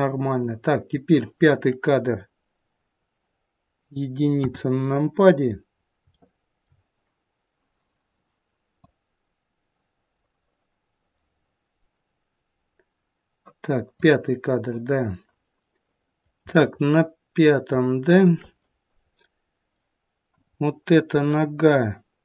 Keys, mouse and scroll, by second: 0.4 click, 4.3 KP_1, 5.5-6.1 scroll down 1, 6.1 shift+middle click, 8.8 click, 16.5 middle click, 19.2 middle click, 20.3 click.